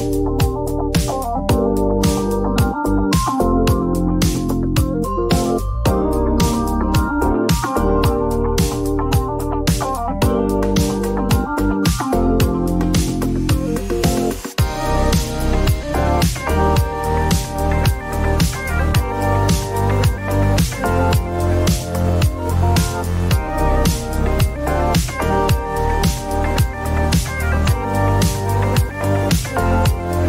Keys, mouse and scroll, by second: 0.8-2.3 typing, 5.0 click, 7.2 right click, 9.5 click, 11.1-14.6 typing, 16.1 click, 18.2 click, 20.3-22.1 typing, 25.0 click, 25.1 click, 28.2 click, 28.4 click.